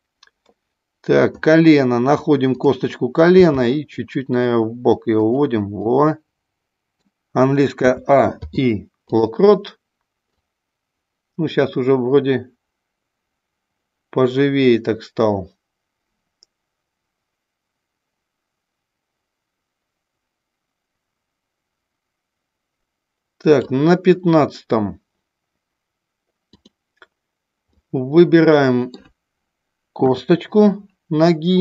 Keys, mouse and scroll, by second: 2.4 click, 3.4 g, 5.2 click, 5.7-6.9 middle drag, 7.7 a, 8.4 i, 10.2-23.7 drag, 26.5 click, 27.6-29.0 middle drag, 30.0 KP_3.